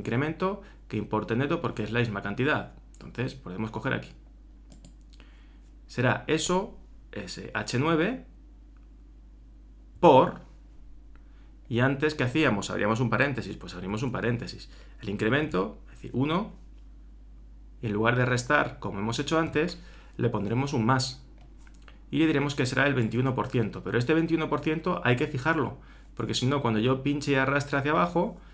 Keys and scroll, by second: 13.9 shift+8.